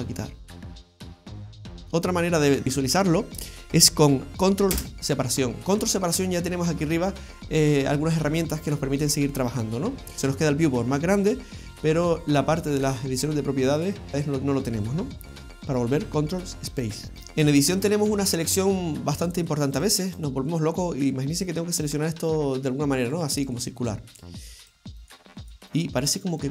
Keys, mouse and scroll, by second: 1.2 ctrl+space, 2.1-2.6 scroll up 3, 2.6-4.2 scroll down 3, 4.8 ctrl+space, 15.4 ctrl+space, 17.1 Tab, 17.7-19.2 scroll up 1, 19.2 right click, 19.2-19.7 scroll up 1, 19.7 right click, 20.1 right click, 23.1 shift+right click, 23.5 shift+right click, 23.8 shift+right click, 24.1 shift+right click, 24.6 shift+right click, 25.0 shift+right click, 25.4 shift+right click, 25.7 shift+right click, 26.1 shift+right click, 26.4 shift+right click.